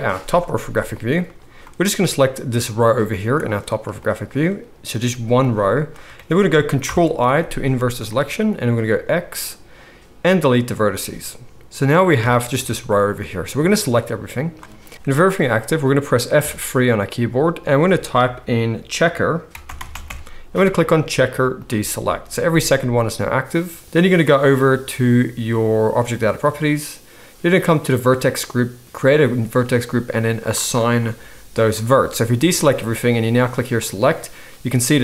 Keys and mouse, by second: 5.4-26.3 drag, 5.4 middle click, 5.4 right click, 5.4 g, 6.8 ctrl+i, 8.9 x, 12.1 a, 16.4 F3, 26.3-28.2 middle drag, 28.2-35.0 drag, 32.3 alt+a.